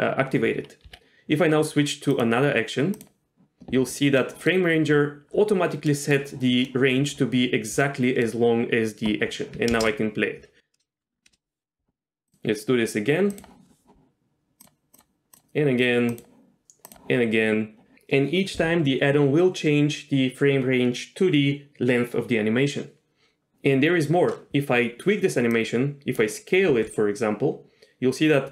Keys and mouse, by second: 0.8 Escape, 2.1 click, 4.3 middle click, 6.1 middle click, 7.9 middle click, 9.7 shift+space, 11.3 shift+space, 12.3-13.4 drag, 14.6 click, 14.9 click, 16.2 click, 25.6 click.